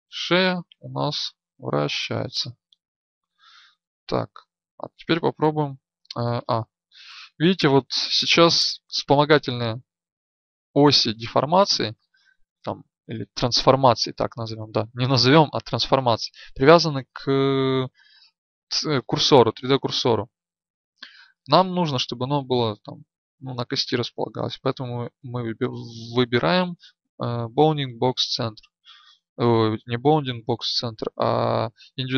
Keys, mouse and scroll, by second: 3.0 ctrl+z, 3.8 right click, 5.4 middle click, 8.8 middle click.